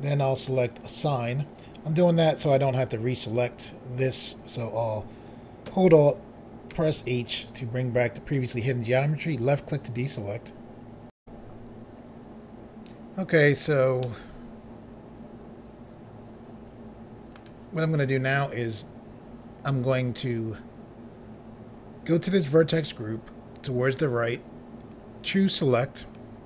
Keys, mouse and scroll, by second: 0.7 click, 1.5 click, 6.7 alt+h, 9.3 click, 11.2 Pause, 13.3 scroll down 1, 14.0 middle click, 24.8 click.